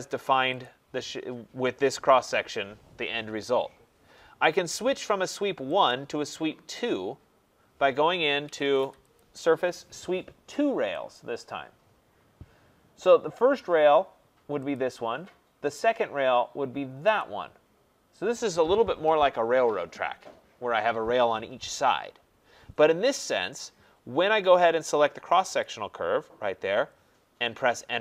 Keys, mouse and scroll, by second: 0.6 click, 5.9 click, 8.4 Escape, 8.6 Escape, 8.7 Escape, 9.1 click, 11.1 click, 14.7 click, 17.2 click, 25.6 click.